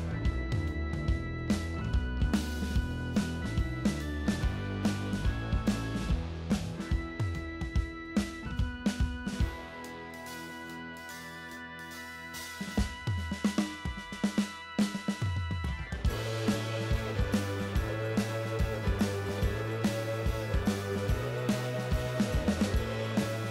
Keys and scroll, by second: 0.3 shift+d, 11.3 d, 14.1-15.5 typing, 20.0 shift+a, 20.6 shift+s.